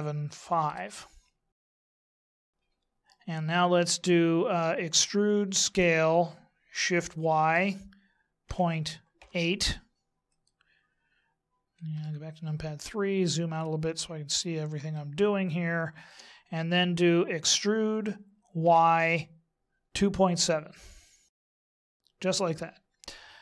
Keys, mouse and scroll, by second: 1.9 middle click, 2.3 middle click, 4.9 e, 11.9 KP_3, 12.7-14.2 scroll down 3, 14.9 shift+middle click, 17.5 e.